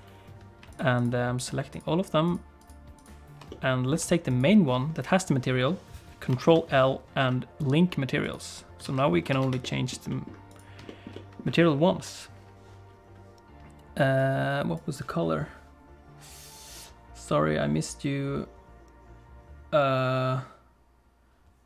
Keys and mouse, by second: 0.7 shift+click, 1.4 shift+click, 1.7 shift+click, 3.0 shift+click, 3.5 middle click, 6.5 ctrl+l, 8.8 alt+a, 9.3 ctrl+s, 9.6 shift+middle click, 10.1 middle click, 10.9 shift+middle click, 11.1 middle click, 14.2 click.